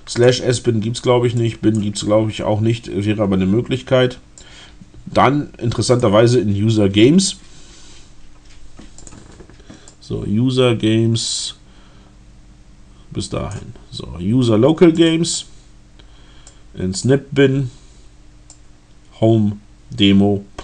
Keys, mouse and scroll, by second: 1.3 click, 4.4-6.1 drag, 9.0 click, 9.8-13.8 drag, 15.0 click, 16.4 click, 18.6-20.6 drag.